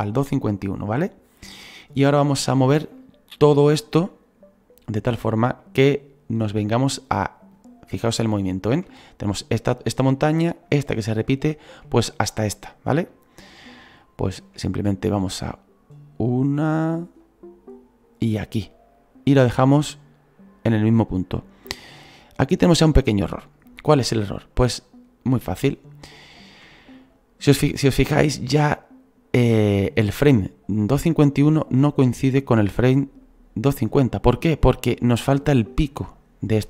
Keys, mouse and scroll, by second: 1.6-2.2 scroll down 8, 2.7 scroll down 2, 3.0-15.3 shift+middle drag, 15.3-23.6 drag, 23.6-24.1 scroll up 3, 24.1 shift+middle click, 24.7-25.5 scroll up 1, 25.5-33.2 shift+middle drag, 33.2-36.6 drag.